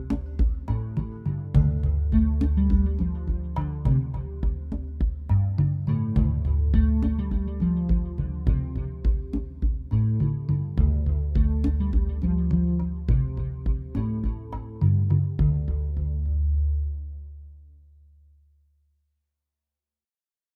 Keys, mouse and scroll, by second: 11.1 click, 14.3 click.